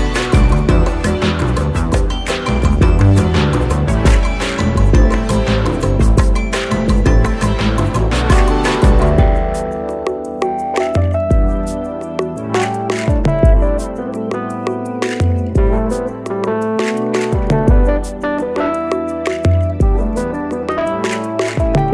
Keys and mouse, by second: 2.5 right click, 5.5 click, 14.0-14.7 shift+click, 16.1-16.9 drag, 18.1 drag, 19.8-20.3 drag.